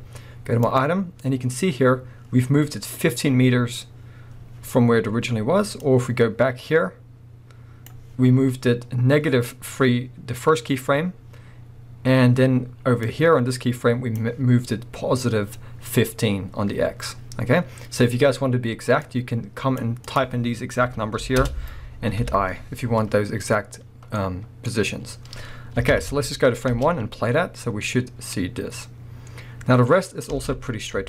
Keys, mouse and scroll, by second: 0.7 click, 5.8-24.2 drag, 21.5 Return, 24.2-26.7 middle drag, 25.9 shift+Left, 26.7 space, 26.8 space, 27.7 scroll up 1, 30.3 space.